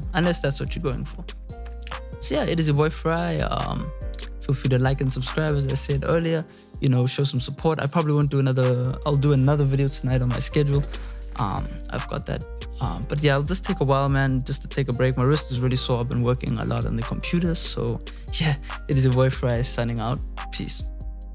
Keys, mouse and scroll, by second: 1.8 F1, 1.8 click.